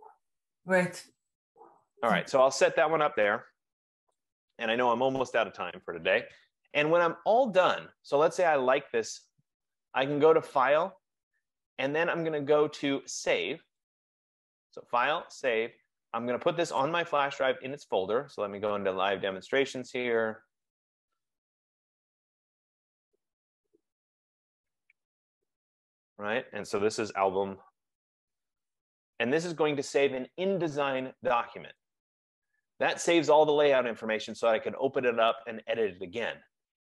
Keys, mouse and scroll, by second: 1.7 click, 4.3 click, 10.8 click, 14.0 click, 16.9 click, 19.1 click, 20.6 click, 20.8 click, 22.4 click, 22.5 click, 24.6 click, 24.8 click, 26.1 click, 27.1-29.6 typing, 32.2 click.